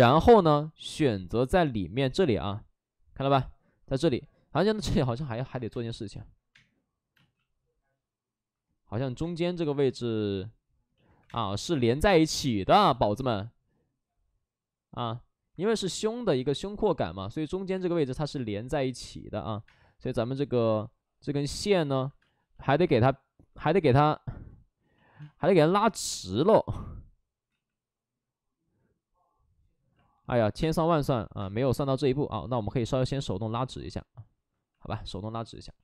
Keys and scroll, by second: 5.1 2, 5.6 space, 6.5 space, 7.1 space, 9.1 space, 9.5 1, 11.2 space, 11.2 2, 12.8 shift+f, 17.7-20.4 typing, 22.1 space, 23.6 space, 25.1 space, 27.4 ctrl+z, 30.4 ctrl+z, 30.4 3, 30.5 space, 30.8 3, 31.3 space, 33.2 3.